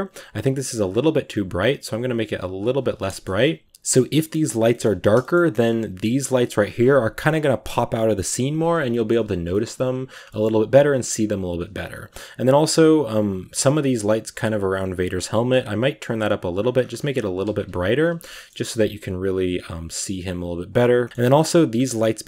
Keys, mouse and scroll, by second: 0.4 g, 0.8-2.9 drag, 2.9 KP_0, 3.6 scroll down 2, 3.7 a, 4.2 scroll up 2, 4.6 shift+middle click, 5.3-6.3 scroll up 5, 6.5-8.7 scroll down 1, 8.7 scroll down 3, 8.7-9.2 shift+middle drag, 9.2 scroll down 1, 9.3 shift+middle drag, 9.5-10.1 scroll up 3, 10.1 shift+middle drag, 10.4 a, 10.8 a, 11.6 right click, 11.7-12.3 scroll down 2, 13.6 right drag, 14.1 right click, 15.4-16.6 drag, 16.6-17.1 scroll up 2, 17.1 scroll up 3, 17.1 s, 17.6 g, 18.0 a, 18.0 scroll down 1, 18.2-18.6 shift+middle drag, 18.6 ctrl+s, 20.3 right click, 21.1 middle click, 21.1 scroll down 3, 21.2 shift+middle click, 22.1 a.